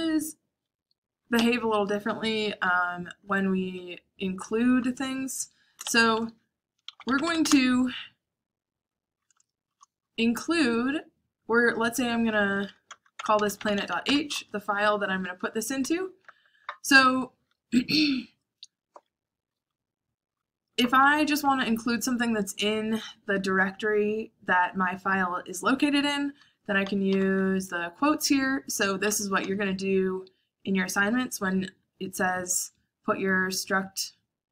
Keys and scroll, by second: 1.4 o, 5.5-7.6 typing, 8.9-9.7 typing, 11.9-16.3 typing, 19.0-21.3 typing, 26.5-27.3 typing, 28.9 k, 29.1 j.